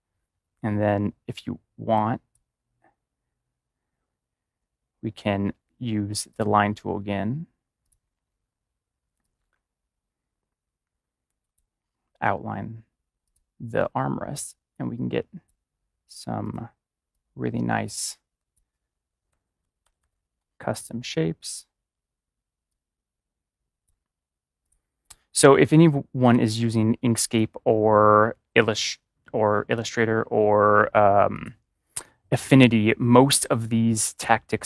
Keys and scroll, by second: 19.2 Left, 19.4 Left, 19.6 Left, 19.8 Left, 19.9 Left.